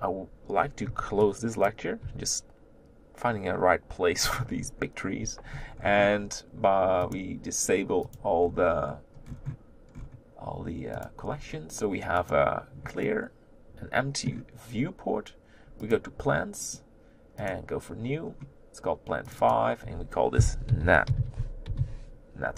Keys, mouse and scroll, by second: 0.5-1.7 scroll down 2, 1.7 b, 2.3 g, 4.6-4.9 scroll up 4, 7.0-8.2 drag, 12.8 click, 13.0-17.5 middle drag, 17.5-19.4 right drag, 19.4-22.5 drag.